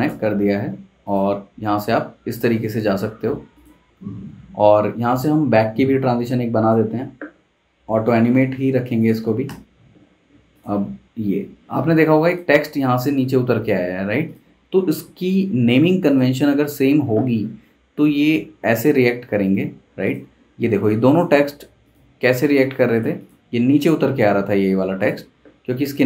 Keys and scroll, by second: 9.5 super+Return.